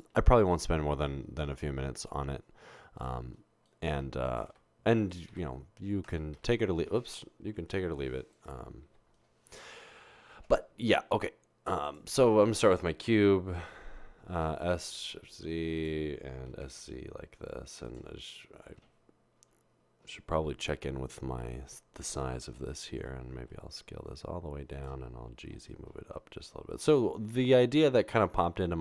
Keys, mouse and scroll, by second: 4.6 Delete, 6.2 Delete, 6.4 Delete, 8.0 ctrl+z, 8.9 Delete, 11.2 a, 14.8 typing, 16.5 typing, 18.7 typing, 24.5-25.5 typing.